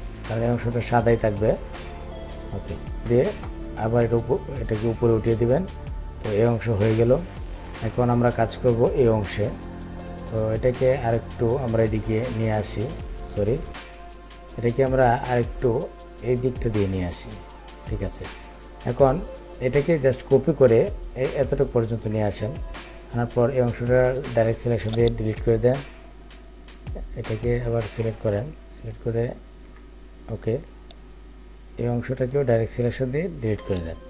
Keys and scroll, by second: 4.4 ctrl+shift+].